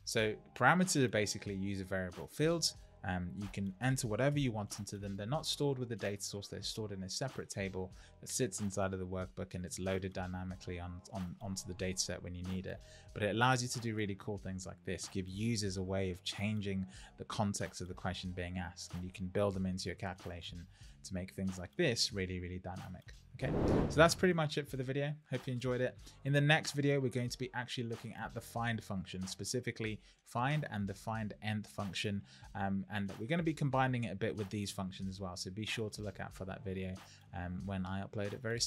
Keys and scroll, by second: 4.3 Return.